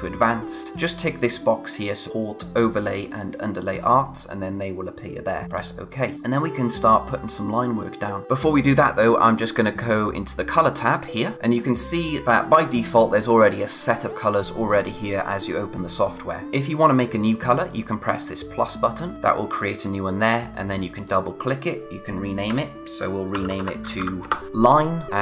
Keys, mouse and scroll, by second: 5.5 click, 8.2 click, 10.9 click, 19.7 click, 23.0-24.5 typing, 25.1 click.